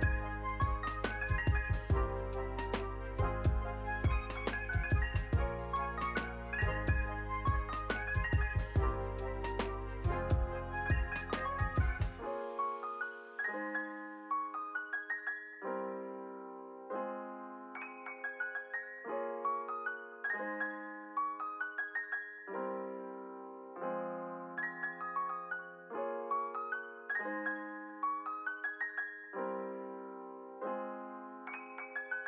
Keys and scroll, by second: 2.6 r, 6.8 Down, 9.3 s, 10.4 1, 10.7 0, 11.0 Return, 12.2 ctrl+z, 20.2 space, 25.8 space, 29.7 Up, 31.6 space.